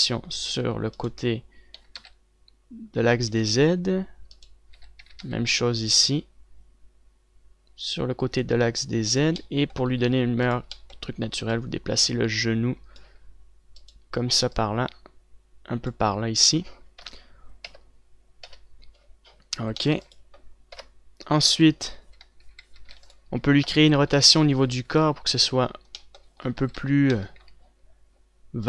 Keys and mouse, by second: 2.5 r, 4.4 z, 5.5 z, 5.9 r, 9.9-14.5 drag, 12.3 middle click, 12.3 right click, 14.5 right click, 15.1-16.2 middle drag, 16.2 click, 17.8 KP_3, 18.5 KP_0, 19.3 KP_1, 20.7 ctrl+s, 21.5-23.2 typing, 23.6 ctrl+s, 24.2 KP_1, 24.4 z, 25.5 a, 27.3 a, 27.9 c.